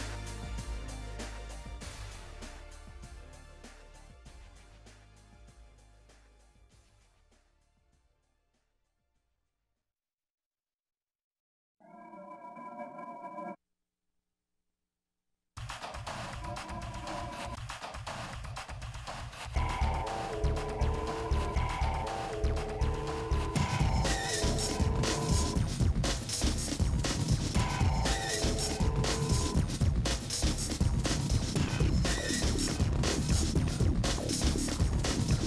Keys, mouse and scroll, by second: 0.2 g, 0.7-1.2 scroll up 6, 0.7 shift+middle click, 1.4 g, 2.3 KP_7, 2.4-3.0 scroll down 11, 3.6 shift+middle click, 3.9 g, 4.8 scroll up 5, 5.0 shift+middle click, 5.2 s, 5.9 ., 6.2 s, 6.7 g, 11.0 middle click, 11.6 e, 13.0 e, 13.5 s, 14.2 e, 14.9 g, 16.1-21.5 typing, 22.3 shift+middle click, 22.7-26.7 typing, 28.2 e, 29.0 g, 30.0 e, 30.7 g, 31.3 e, 32.1 scroll down 3, 32.3-34.9 shift+middle drag, 34.9 g.